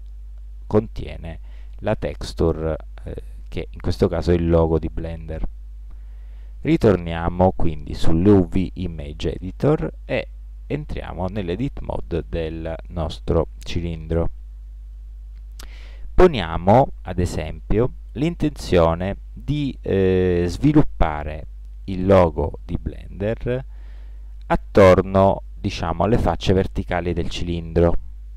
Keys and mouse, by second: 1.4-3.9 right drag, 4.9-8.2 middle drag, 12.3 Tab, 18.8-20.5 middle drag.